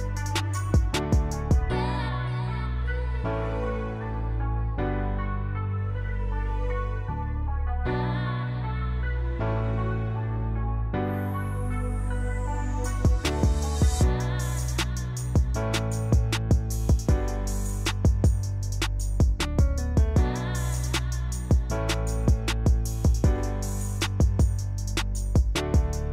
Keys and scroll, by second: 1.0 j, 4.0 j, 10.6-11.3 typing, 14.2 f, 18.2 2, 18.4 Return, 24.2 2, 24.7 Return.